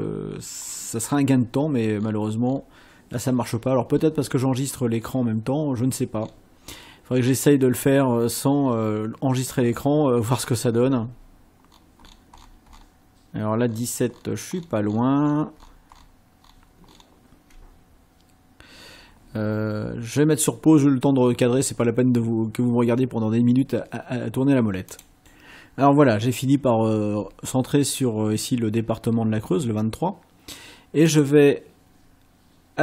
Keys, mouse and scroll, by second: 0.7-1.3 ctrl+scroll down 4, 2.0-2.8 ctrl+scroll down 4, 3.4-3.7 ctrl+scroll down 2, 3.9-4.2 ctrl+scroll down 2, 5.0-5.3 ctrl+scroll down 2, 6.3-7.0 ctrl+scroll down 4, 7.8 ctrl+scroll down 2, 8.6-9.0 ctrl+scroll down 2, 9.6-9.9 ctrl+scroll down 2, 11.7-12.4 ctrl+scroll down 4, 12.7-13.0 ctrl+scroll down 2, 13.7-14.5 ctrl+scroll down 4, 15.3-15.9 ctrl+scroll down 4, 16.5-17.2 ctrl+scroll down 4, 25.1 click, 31.2 click.